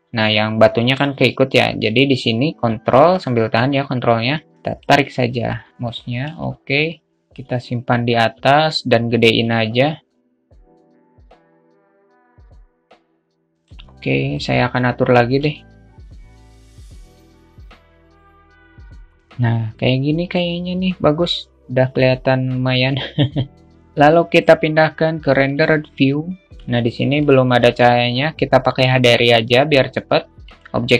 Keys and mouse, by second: 2.7-4.6 ctrl+drag, 6.0 alt+z, 6.6-7.7 drag, 8.3 s, 12.0-13.5 drag, 15.2 alt+shift+middle click, 16.0 q, 16.0 alt+shift+middle click, 16.7 click, 16.7 q, 17.5 click, 20.0-23.6 drag, 23.6 KP_0, 26.9 alt+shift+middle click.